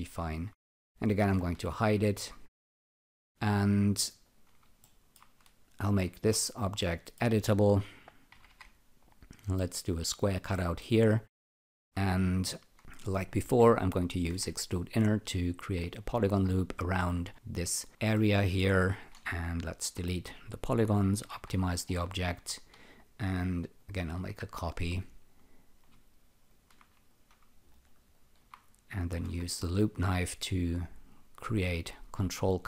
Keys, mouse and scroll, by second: 0.1 alt+shift+click, 2.2 alt+shift+click, 3.7 alt+shift+click, 4.8 alt+middle click, 5.8 c, 6.8 alt+middle click, 8.3 l, 8.5 l, 9.3 click, 10.5 alt+middle click, 11.0 alt+right click, 14.7 click, 18.1 alt+middle click, 19.8 Delete, 21.3 n, 21.9 scroll up 1, 23.8 ctrl+click, 26.4 alt+shift+click, 27.7 alt+right click, 28.1 alt+click, 29.2 k, 31.2 click.